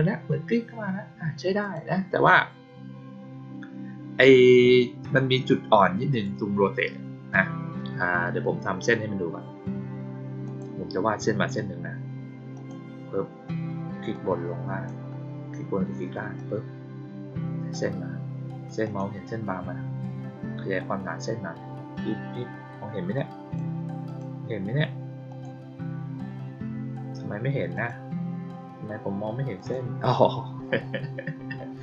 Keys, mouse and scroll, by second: 1.5 click, 6.0 click, 10.4 click, 12.5 click, 14.0 click, 16.3-17.6 drag, 18.8 click, 19.2-21.8 middle drag, 23.1 click, 24.0 click, 25.2 click, 26.4 middle click, 27.7 click, 29.5 click.